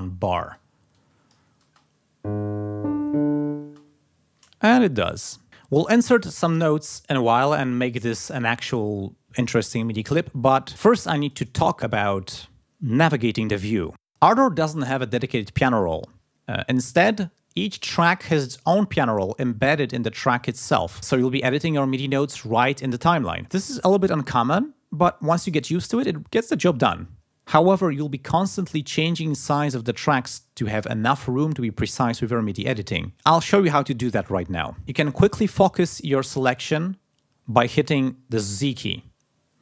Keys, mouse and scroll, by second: 0.0 ctrl+scroll up 2, 0.9 ctrl+click, 38.6 z.